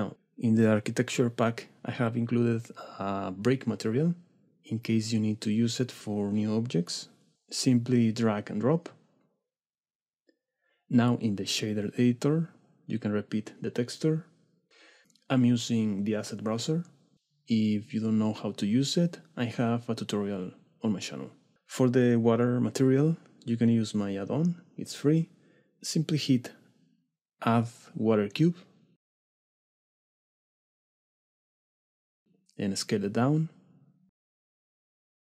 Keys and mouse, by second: 0.0 w, 2.0 click, 11.8-12.6 drag, 13.6 click, 17.2 click, 19.6 click, 21.5 x, 22.2 x, 25.7 shift+middle click, 26.0 middle click, 28.3 click, 29.3 middle click, 31.2-31.6 middle drag, 31.9 click, 32.5 middle click, 32.9 s, 33.2 shift+middle drag, 33.4 click, 33.7 shift+middle click, 33.9 KP_7, 34.7 g.